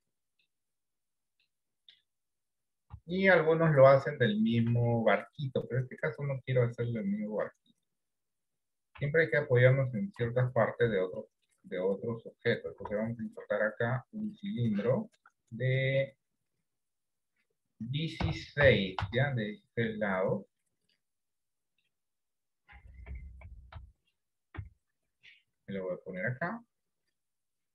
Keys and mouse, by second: 0.1 middle click, 1.0 middle click, 3.1 KP_7, 5.1 shift+middle click, 9.1 KP_1, 10.3 KP_3, 11.5 shift+middle click, 12.9 shift+a, 15.0 shift+middle click, 15.9 click, 16.8-19.9 drag, 21.6 middle click, 24.7 KP_7, 26.3-27.7 drag.